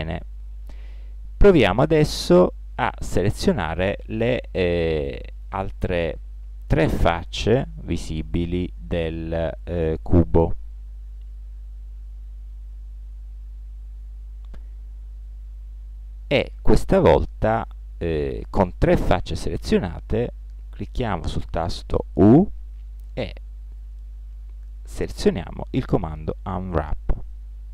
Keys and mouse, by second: 3.9-5.6 middle drag, 6.3 right click, 7.7-9.1 middle drag, 13.5 middle click, 14.9-16.7 middle drag, 16.9-18.5 middle drag, 22.1 u.